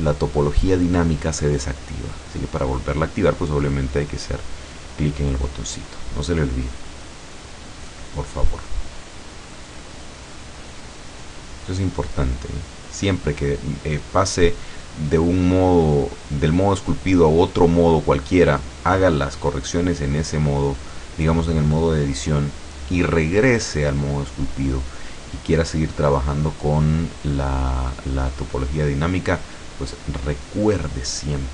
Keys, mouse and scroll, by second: 3.4 click, 4.9 scroll up 1, 5.8-8.4 drag, 8.5-10.5 drag, 10.7-12.3 drag, 12.5 click, 13.3 click, 14.0 click, 14.9-18.8 drag, 18.9 click, 19.6-21.0 drag, 21.1 click, 21.7 click, 22.4 click, 23.3-24.9 drag, 25.0 scroll down 1, 25.4-27.4 middle drag, 28.4 middle click, 29.3 click, 30.3-30.8 scroll up 1, 30.9 middle click.